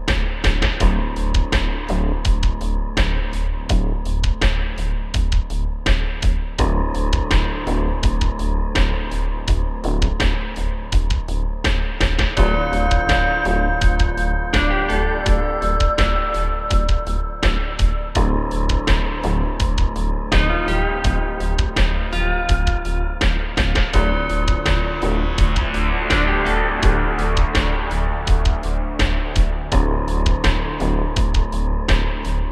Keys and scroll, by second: 2.5 shift+space, 11.3 space, 11.4 space, 11.9 shift+f, 12.9 shift+f, 21.3 space, 31.5 space.